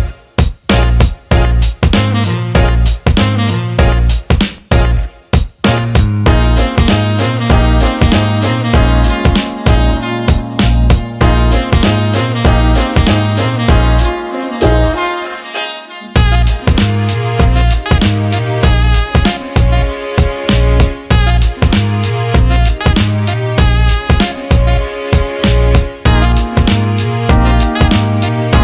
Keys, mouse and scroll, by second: 0.4 alt+middle click, 1.1 alt+middle click, 2.0 alt+middle click, 2.6 alt+middle click, 3.6 alt+middle click, 5.2 click, 8.9 click, 10.6 click, 11.7 click, 11.9 click, 15.1 alt+middle click, 16.2 click, 16.3 click, 17.1-18.7 drag, 19.1 alt+middle click, 21.2 click, 22.1 alt+shift+middle click, 23.2-23.8 alt+middle drag, 23.9 alt+shift+middle drag, 24.9 alt+shift+middle drag, 26.5 alt+shift+middle click, 26.7 alt+shift+right click, 26.9 click, 27.2 Tab, 27.8 alt+middle click.